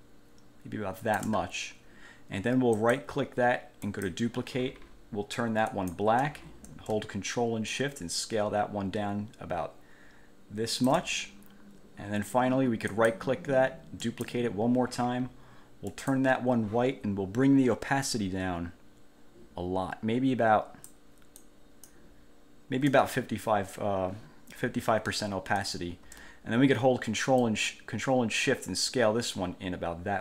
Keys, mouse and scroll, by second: 2.9 click, 4.0 click, 5.9 click, 7.8-11.2 ctrl+shift+drag, 13.0 click, 14.2 click, 16.1 click, 18.2-21.3 drag, 21.6 click, 27.6-30.2 ctrl+shift+drag.